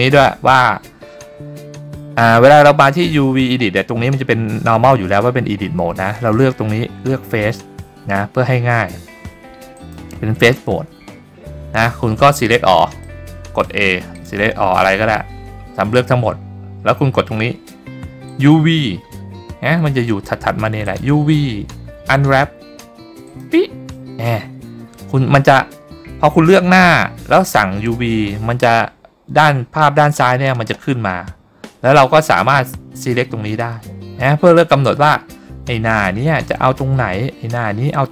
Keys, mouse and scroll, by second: 9.9 click, 13.1 click, 14.3 click, 14.7 a, 18.4 click, 21.0-23.5 drag, 33.1 click.